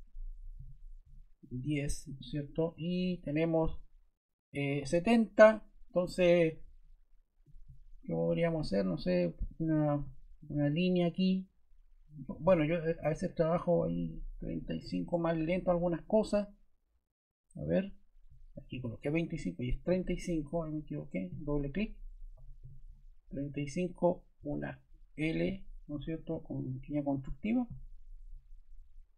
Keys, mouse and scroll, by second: 0.1-1.0 typing, 2.1 typing, 4.9 Escape, 14.4-14.8 typing, 16.2 typing, 19.0 ⟲, 22.3 typing, 24.0 typing.